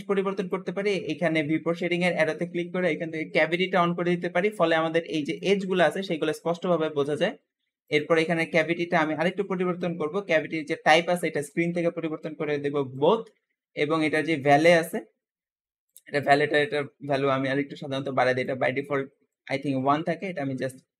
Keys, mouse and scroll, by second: 0.2-3.4 drag, 7.7-10.9 drag.